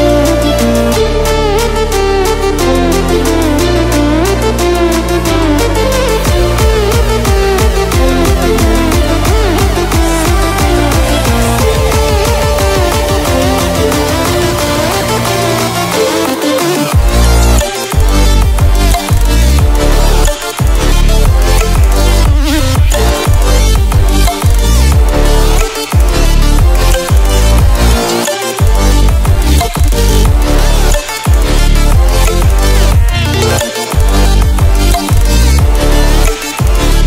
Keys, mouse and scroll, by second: 0.0-0.7 ctrl+alt+scroll down 2, 1.3 click, 2.5 space, 2.8 click, 2.9-3.4 space, 3.5-5.9 drag, 8.3 ctrl+w, 8.5 ctrl+w, 11.1 ctrl+w, 11.9-17.6 drag, 28.3-29.5 drag, 30.4-30.7 drag, 32.4 ctrl+alt+scroll up 1, 33.2-35.8 drag.